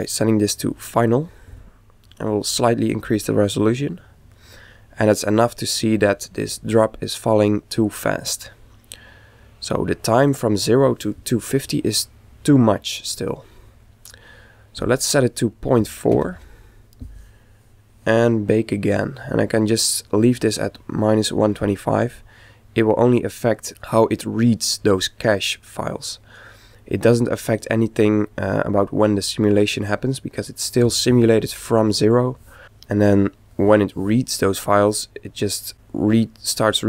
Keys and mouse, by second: 3.0 click, 14.8 click, 16.3 KP_Decimal.